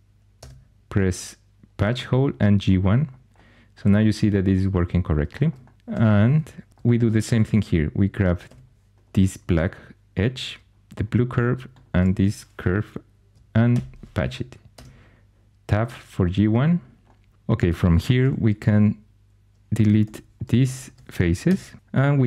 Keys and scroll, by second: 0.3 Tab, 5.5-6.6 typing, 8.4 2, 13.7 shift+super+p, 14.7 Tab, 18.2 4, 20.0 3, 21.4 shift+x, 21.9 3.